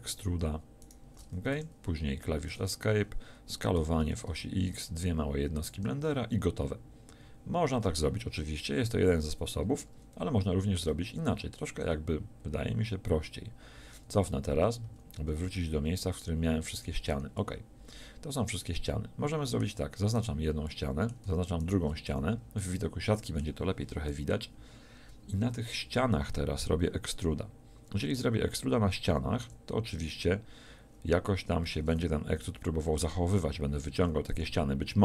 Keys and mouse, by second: 1.5 e, 3.8 s, 5.7-6.9 drag, 13.8 ctrl+z, 14.2 ctrl+z, 14.5 ctrl+z, 14.9 ctrl+z, 15.1 ctrl+z, 15.5 ctrl+z, 15.7 ctrl+z, 16.0 ctrl+z, 16.4 ctrl+z, 17.4-19.6 drag, 20.1-22.1 drag, 22.1 z, 24.2 KP_1, 29.5 e.